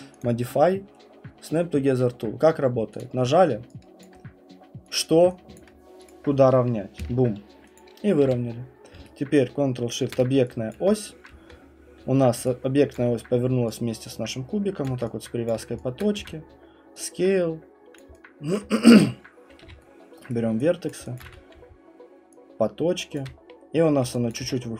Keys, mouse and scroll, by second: 0.2 click, 3.0 click, 4.9 click, 5.6 alt+click, 6.1 click, 7.0 Return, 7.8 click, 8.2 f, 8.5 scroll, 10.7 click, 12.9 middle click, 12.9 alt+right click, 12.9 click, 13.5 ctrl+shift+v, 14.0 typing, 14.1-14.8 ctrl+shift+v, 14.8 click, 16.0 click, 16.2 r, 18.0 click, 18.5 click, 19.6 q, 20.3 right click, 20.9 click, 21.2 click, 21.3-21.7 typing, 23.2 click, 23.2-24.5 typing, 24.3 click.